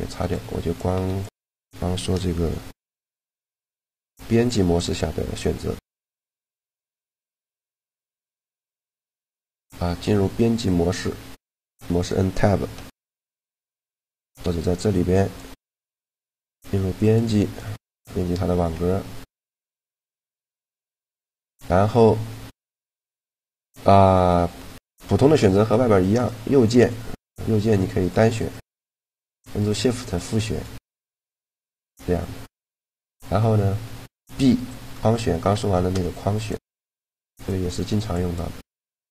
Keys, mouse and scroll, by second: 0.0 b, 0.7 x, 2.6 shift+c, 3.4 shift+a, 7.0 s, 7.8 s, 8.5 Tab, 10.7 Tab, 12.6 Tab, 12.8 Tab, 13.1 Tab, 13.7 Tab, 14.6-16.5 drag, 17.4-19.3 middle drag, 19.9 a, 25.0 right click, 32.5 a, 34.0 b, 35.8 b, 36.9 b, 37.8 b, 38.9 b.